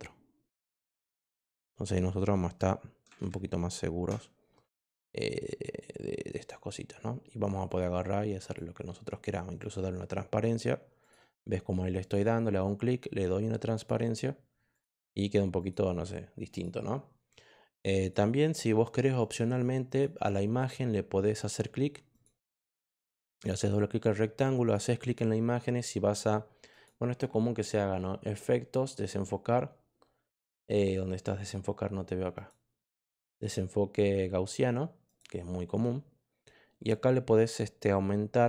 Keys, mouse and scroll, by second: 0.7 click, 5.7 click, 7.6 click, 8.3 click, 9.5 click, 10.9 click, 11.9 click, 13.7 click, 14.7 click, 15.5 click, 16.4 click, 17.9 click, 19.1 click, 19.8 click, 21.3 click, 22.1 click, 23.1 click, 23.3 click, 24.6 click, 26.6 click, 32.3 click, 35.0 click.